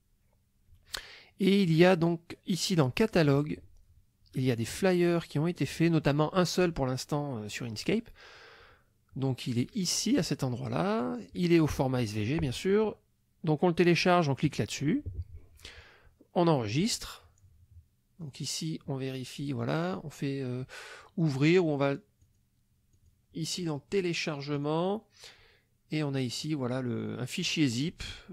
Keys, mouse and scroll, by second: 2.7 click, 4.8 click, 8.8-9.2 scroll down 1, 10.7 click, 11.6 click, 14.4 click, 16.7 click, 18.2 click, 22.2 click, 22.9 click, 24.5 click, 26.4 click.